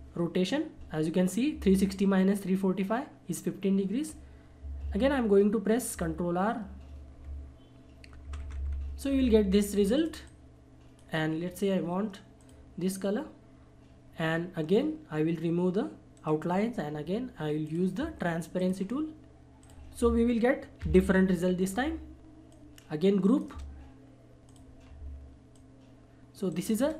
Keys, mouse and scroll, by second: 4.8 ctrl+right click, 5.9 ctrl+r, 9.9-12.7 drag, 16.1 right click, 17.7 click, 20.8 ctrl+g, 22.5 shift+click, 23.2 shift+right click, 24.4 click, 25.5 shift+click, 26.5 shift+right click.